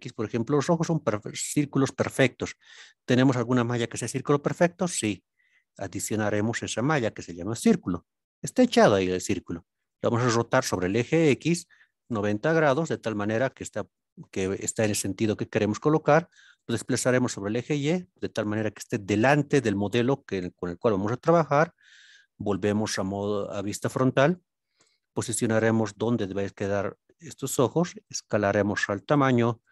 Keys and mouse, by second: 6.1 shift+a, 8.8-9.3 middle drag, 12.0 KP_9, 12.1 KP_0, 13.6-14.1 middle drag, 16.5 y, 17.7 click, 18.9-19.2 middle drag, 21.1 KP_1, 27.3 click, 28.0 s, 29.0 click, 29.6 KP_Decimal.